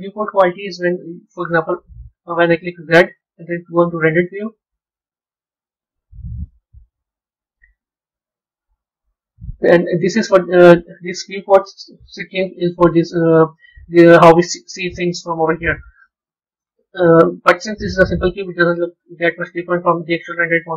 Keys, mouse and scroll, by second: 2.7 z, 9.5-10.2 scroll up 5, 10.2-14.0 middle drag, 14.0-14.7 scroll down 3, 14.7-17.7 middle drag.